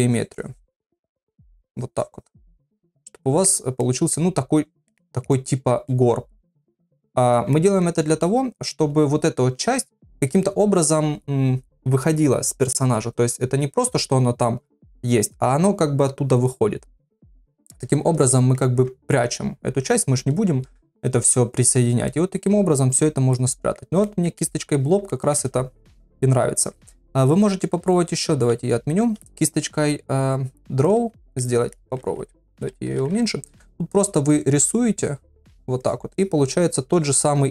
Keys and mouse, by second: 2.7 middle click, 3.8 middle click, 4.7 click, 4.9 middle click, 5.0 click, 5.4 middle click, 5.9 middle click, 6.8 ctrl+middle click, 7.6 shift+middle click, 18.3 ctrl+middle click, 22.1 middle click, 23.4 middle click, 24.0 shift+middle click, 24.4 middle click, 25.1-26.5 ctrl+middle drag, 27.3 ctrl+z, 28.1 ctrl+z, 28.5 ctrl+z, 30.9 click, 31.4 middle click, 32.5 [, 32.6-34.0 [, 34.0 click, 34.3 click, 34.7 click, 35.0 click, 35.3 click, 35.8 click, 36.2 click, 36.6 click, 37.0 click, 37.4 click.